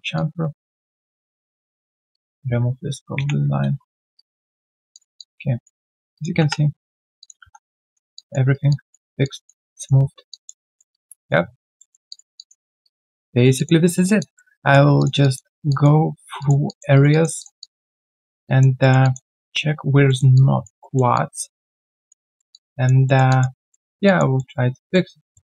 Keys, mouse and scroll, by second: 0.1 alt+click, 1.2 alt+click, 1.5 q, 2.1 double click, 3.1 ctrl+Delete, 4.1 right click, 4.6-5.0 scroll down 1, 5.1 alt+click, 5.8 alt+right click, 6.1 alt+click, 6.4 3, 6.8 scroll down 1, 7.3-7.8 scroll down 1, 8.0 typing, 8.1 alt+click, 8.5 alt+right click, 8.7 alt+click, 9.0 alt+right click, 9.2 alt+click, 10.0 alt+scroll down 1, 10.3 alt+click, 10.6 alt+middle click, 10.9 alt+click, 11.4-11.8 alt+scroll down 2, 11.8 alt+middle click, 12.3 alt+click, 12.6 alt+right click, 12.8 alt+click, 13.9 alt+middle click, 14.2 alt+click, 14.6 alt+middle click, 15.2 alt+click, 15.5 alt+right click, 15.7 alt+click, 16.0-16.4 alt+scroll down 1, 16.6 alt+click, 16.9 alt+right click, 17.1 alt+click, 17.6 alt+click, 18.2 alt+middle click, 18.4 alt+click, 18.8 alt+middle click, 19.0 alt+click, 19.3 alt+middle click, 20.0 alt+middle click, 20.3 alt+click, 20.8 alt+middle click, 21.1 alt+click, 22.3 alt+middle click, 22.5 alt+click, 23.0 alt+middle click, 23.3 alt+click, 23.5 alt+middle click, 23.8 alt+right click, 24.0 alt+click, 24.3 alt+middle click, 25.0 alt+scroll down 1, 25.3 alt+middle click.